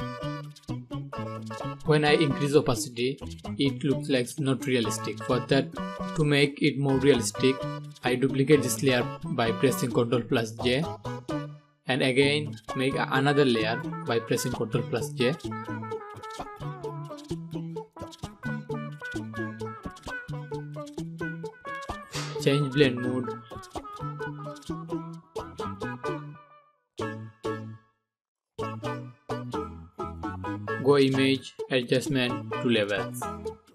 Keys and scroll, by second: 7.5 ctrl+j, 11.5 ctrl+j.